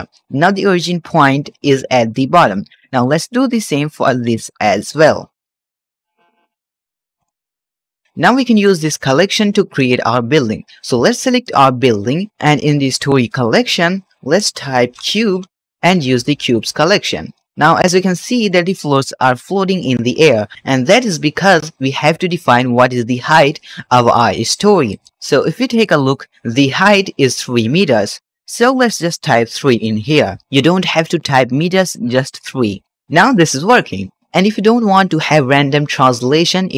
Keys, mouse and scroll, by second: 2.3 shift+middle drag, 2.5 shift+scroll down 1, 2.8 click, 3.3 Tab, 3.6 middle click, 4.0 3, 4.1 click, 4.7 shift+s, 5.1 Tab, 5.2-6.5 right drag, 6.5-7.0 middle drag, 7.0 KP_Divide, 7.4-8.5 scroll down 4, 8.5 click, 11.3 click, 13.2-16.5 drag, 17.1-19.7 shift+middle drag, 20.1 shift+middle click, 22.4-24.8 drag, 25.6 click, 28.0 click, 28.8-32.9 drag, 34.2 shift+middle click.